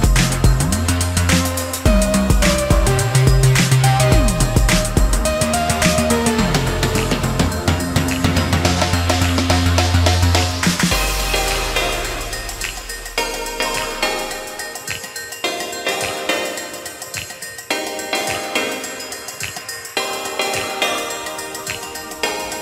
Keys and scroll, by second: 7.6 space, 9.0 shift+s, 9.9 space, 11.7 s.